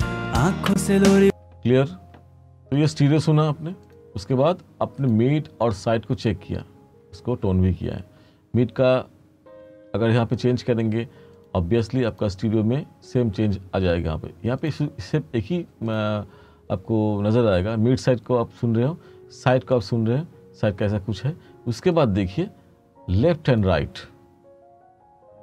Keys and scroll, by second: 0.7 space.